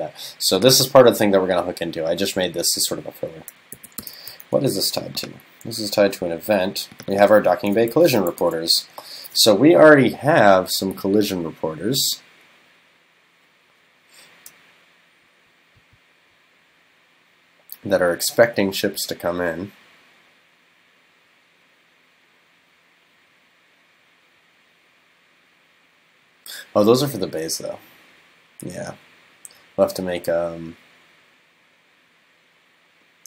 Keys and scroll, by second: 3.8 super+c, 4.0 super+f, 8.0 super+c, 8.5 super+f.